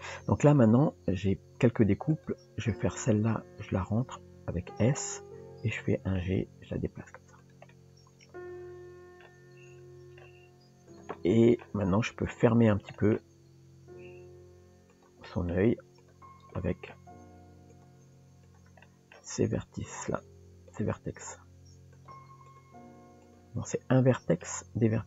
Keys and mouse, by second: 3.4 s, 5.0-6.2 middle drag, 7.4 g, 7.7-10.2 middle drag, 10.4 g, 11.2 middle click, 12.9 middle click, 15.3 middle click, 16.0 click, 16.6 middle click, 18.5 click, 18.8 middle click, 20.7 click, 22.5 click, 23.8 middle click.